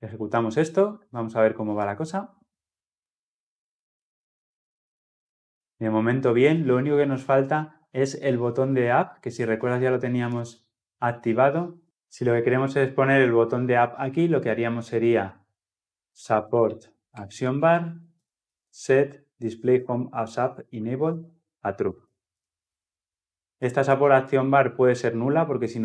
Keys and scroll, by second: 1.7 shift+F10, 16.9 Return.